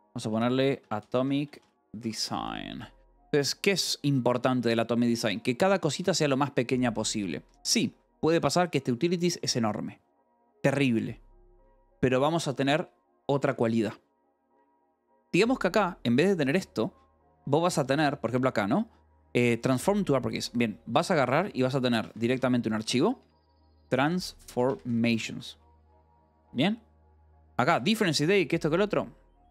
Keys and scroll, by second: 0.0-3.8 typing, 4.5 Escape, 5.1 j, 6.5 shift+v, 7.3 Escape, 8.5 j, 11.6 Escape, 15.7 shift+v, 16.3 k, 17.6 j, 20.3 Escape, 20.9 h, 22.0-25.6 typing, 27.1 k, 28.0 k, 29.1-29.5 typing.